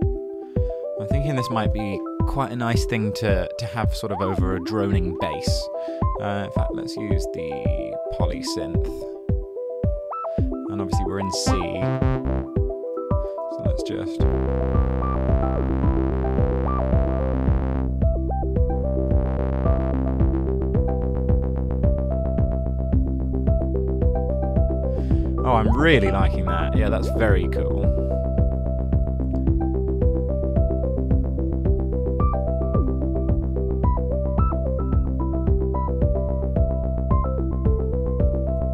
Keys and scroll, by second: 0.5 shift+super+t, 1.4-2.7 typing, 6.0 super+z, 6.6-7.6 typing, 7.8 Down, 8.0 Down, 8.1 Down, 8.3 Return, 11.8 shift+Down, 12.2 shift+Down, 12.9 super+d, 38.6 super+z.